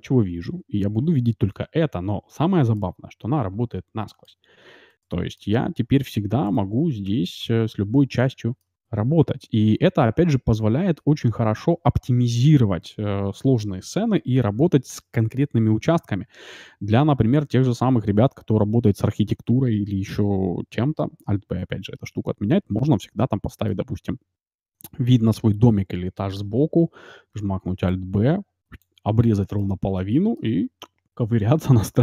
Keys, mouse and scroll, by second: 2.7-4.4 middle drag, 4.7-7.3 middle drag, 6.4-8.0 right drag, 7.1 Tab, 7.5-9.2 middle drag, 9.8-12.2 middle drag, 10.1 Tab, 11.2 Tab, 11.6 Tab, 20.1 a, 21.3 alt+b, 21.7-24.1 middle drag, 23.9-24.9 scroll up 1, 24.9-26.0 middle drag, 27.3 alt+b, 29.5-31.3 middle drag, 31.8 scroll up 1.